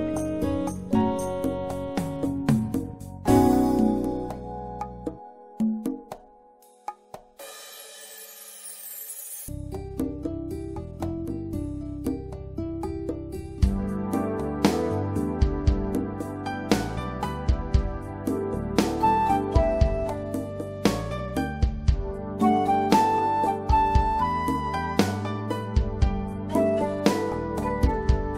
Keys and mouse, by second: 0.5-3.3 right drag, 4.3-6.3 drag, 7.2-10.3 drag, 10.3-12.9 right drag, 12.1 click, 13.1 click, 18.6 middle click, 19.2-21.1 drag, 24.6-26.1 drag, 27.4-27.7 drag.